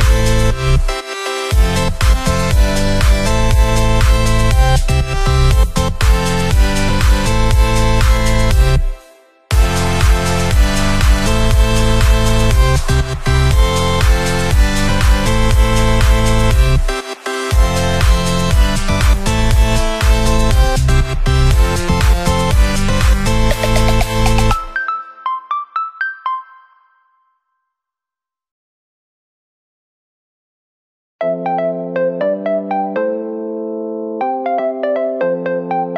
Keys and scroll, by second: 1.1 Left, 3.5 Left, 3.9 Right, 5.3 Left, 6.8 Right, 8.3 Left, 8.9 ctrl+-, 9.4 Left, 10.1 Left, 11.0 ctrl+=, 11.2 Left, 12.0 ctrl+[, 12.6 ctrl+], 12.7 Right, 13.9 ctrl+0.